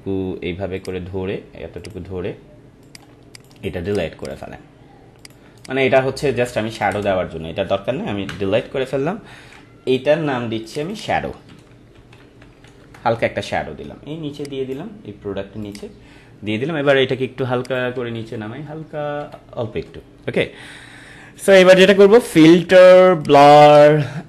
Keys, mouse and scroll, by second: 5.6 right click, 6.7 click, 6.9 Return, 8.2 Delete, 9.4 ctrl+d, 10.6 click, 11.2-13.1 typing, 14.3-15.6 drag, 17.9 Down, 22.2 click.